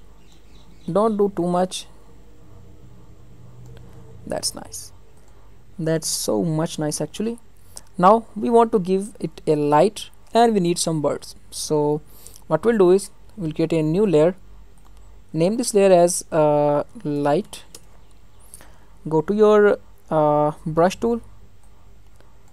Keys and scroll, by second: 17.7 Return.